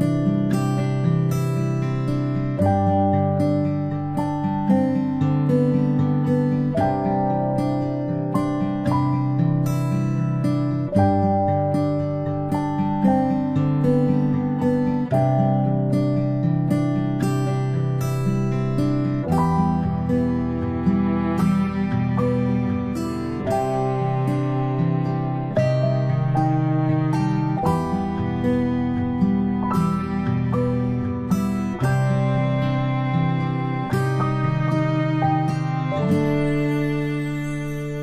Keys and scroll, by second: 4.5 ctrl+p, 23.9-27.5 typing, 25.9 End.